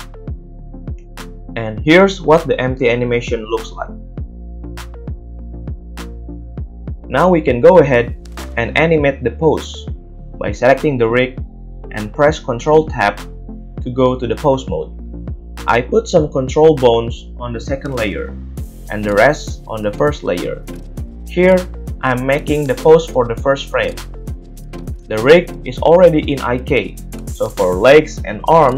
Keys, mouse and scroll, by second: 0.8-18.4 drag, 0.8 a, 1.4 space, 9.1 middle click, 9.1 right click, 18.4-20.3 shift+middle drag, 20.3-20.7 drag, 20.7-26.3 middle drag, 22.9 ctrl+Tab, 26.3-28.7 drag, 26.5-27.0 middle drag, 28.6 g.